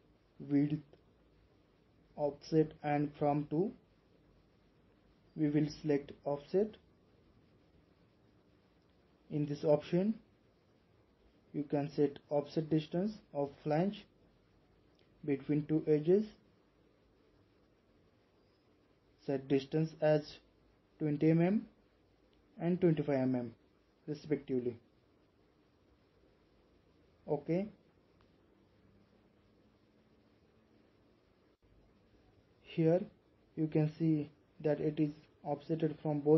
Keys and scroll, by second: 20.8-21.2 typing, 23.0-23.3 typing.